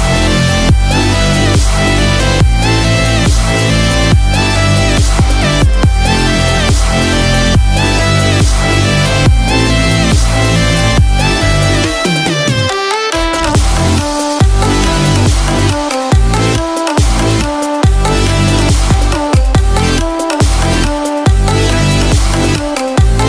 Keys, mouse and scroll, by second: 12.5 click.